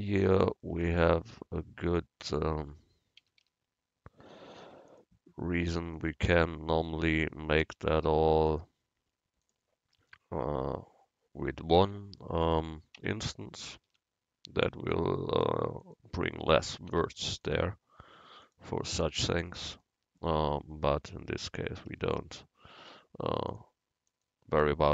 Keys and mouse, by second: 2.6 Tab, 3.3 a, 3.5 a, 7.7 u, 10.1 Tab, 13.1 Tab, 13.7 a, 13.9 a, 15.0-16.9 drag, 17.0 u, 20.4 Tab, 21.4 Tab, 22.0 a, 22.2 a.